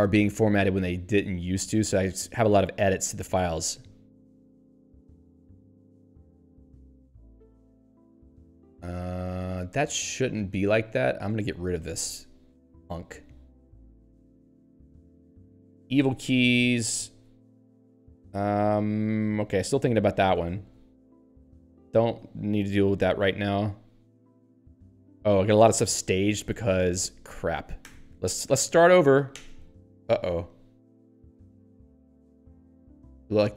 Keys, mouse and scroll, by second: 3.6 ctrl+p, 5.9 s, 6.4 ctrl+n, 8.2 ctrl+p, 10.7 x, 11.4 ctrl+g, 11.8 k, 12.9 y, 13.6 ctrl+n, 14.6 ctrl+p, 16.0 Tab, 16.5 ctrl+n, 17.0 n, 17.7 p, 19.7 Tab, 20.0 n, 20.3 Tab, 22.3 n, 25.6 p, 27.8 shift+u, 29.9 y.